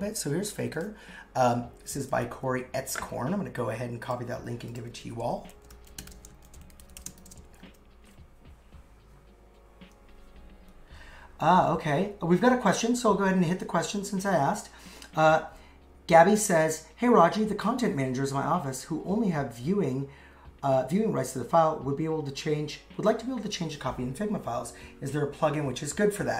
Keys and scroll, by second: 5.5 shift+f, 6.4 shift+p, 7.2 shift+;, 7.2 shift+space, 7.7 super+v.